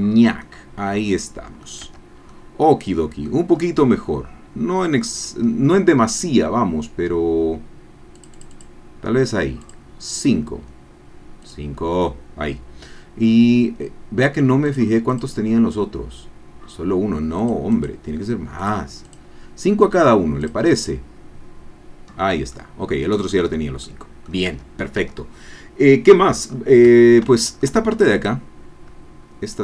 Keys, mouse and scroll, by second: 0.2 scroll down 2, 0.4-1.8 drag, 2.1 Tab, 2.3-3.4 drag, 3.5 scroll up 1, 3.9-5.6 drag, 6.0-8.1 middle drag, 8.2 click, 11.5 click, 13.2-13.5 scroll up 1, 14.7 click, 15.1 click, 17.4 click, 17.8 click, 18.6 click, 19.1 click, 20.4 click, 22.2 scroll down 2, 22.5 click, 23.8 click, 24.6 Tab, 26.5-26.8 scroll up 2, 27.0 Tab, 27.5 shift+click, 28.1 click.